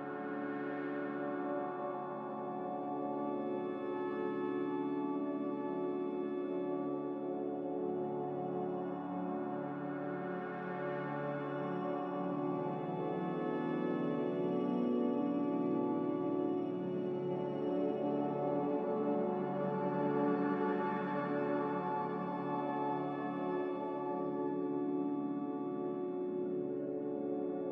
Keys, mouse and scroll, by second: 1.8 click, 3.6 z, 5.8 2, 6.1 Return, 8.8 click, 8.9 Return, 20.0-20.8 typing, 21.7 ctrl+z, 23.8-24.6 typing, 27.1-27.7 typing.